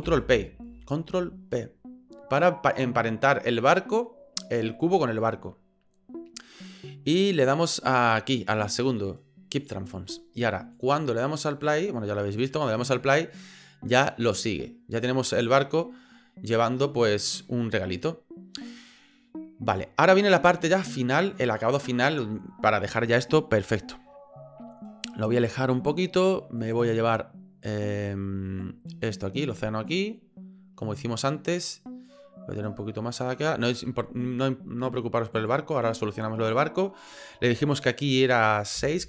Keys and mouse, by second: 0.0 ctrl+p, 3.0-9.7 middle drag, 10.8 click, 12.8-14.3 middle drag, 15.4 middle click, 18.6 click, 19.7 click, 20.9-21.2 middle drag, 21.5-21.9 middle drag, 25.9 middle click, 26.6 right click, 28.7-29.9 drag, 30.8 middle click, 32.1-33.2 drag, 35.3 click, 37.0-39.0 drag.